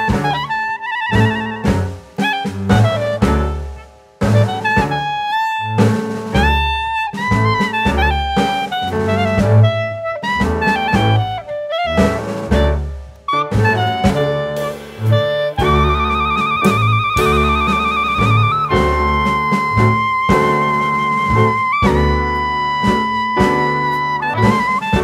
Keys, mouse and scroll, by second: 1.1 middle click, 2.6 click, 3.0 shift+middle click, 3.4-4.1 scroll up 1, 4.1 scroll up 1, 4.4 s, 5.9 click, 6.7 s, 8.0 click, 9.2-9.8 scroll up 1, 9.8-10.1 scroll up 1, 10.1 click, 12.3 s, 14.2 click, 15.1 s, 16.2 middle click, 16.9-17.3 scroll down 1, 17.8 click, 19.4 middle click, 20.2 click, 22.0 click, 22.4 shift+middle click, 23.4 Tab, 23.7 click.